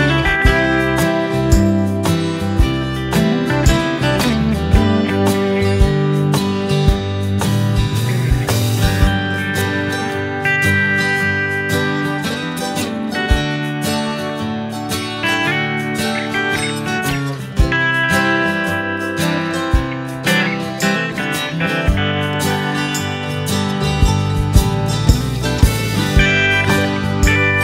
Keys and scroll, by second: 7.5 Delete, 8.8 Delete, 10.8 Delete, 14.0 space, 14.5 space, 19.6 space, 19.8 space, 21.6 space, 24.2 Right, 25.4 Right.